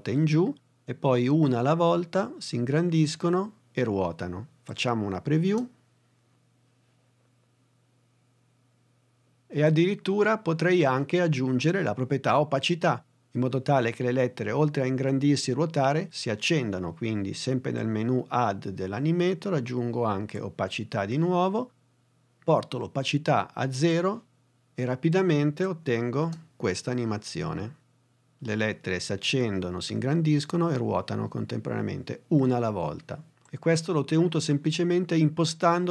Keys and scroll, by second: 5.5 space, 26.2 space.